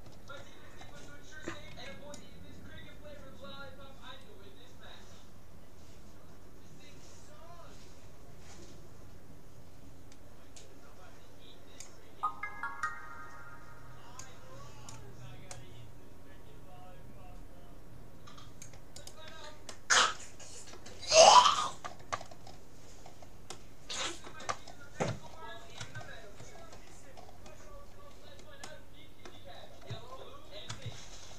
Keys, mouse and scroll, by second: 0.8-1.1 scroll down 1, 1.7 c, 19.7-21.5 middle drag, 21.5-21.9 scroll down 1, 21.9-23.1 middle drag, 23.1-23.5 scroll down 1, 23.5-25.5 middle drag, 25.5-26.6 scroll down 1, 26.6-27.8 scroll up 1, 27.8-28.5 scroll down 1, 28.5-31.3 middle drag.